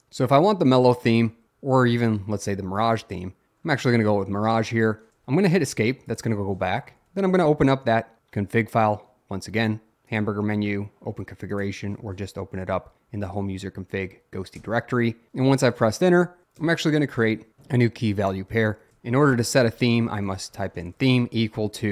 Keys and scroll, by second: 1.4 Down, 5.4 Escape, 6.9 Up, 7.1 Up, 14.7 Return, 16.7 typing, 19.5-21.0 typing.